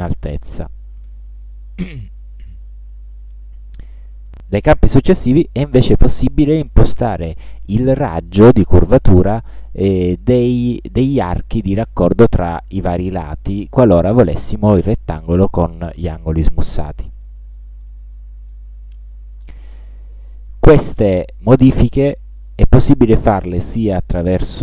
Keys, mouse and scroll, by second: 0.4 8, 1.2 Tab, 3.4-3.9 scroll up 1, 4.3 ctrl+scroll up 2, 8.3 2, 9.9 click, 10.8 2, 13.2 click, 14.3 KP_2, 15.5 Tab, 22.5 ctrl+scroll up 1.